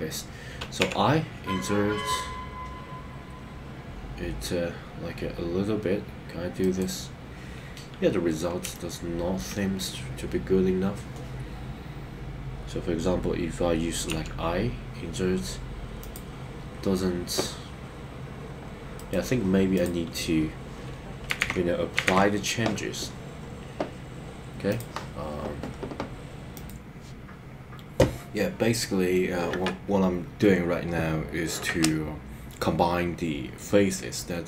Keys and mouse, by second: 6.6 right click, 8.7 shift+middle click, 16.0 click, 19.1 right click, 19.7 click, 21.5 super+z, 22.1 super+z.